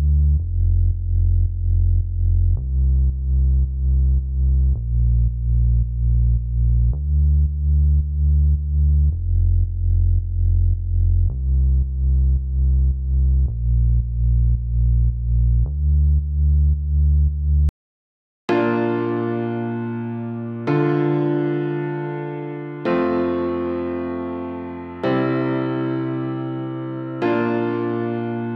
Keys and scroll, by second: 17.4 s.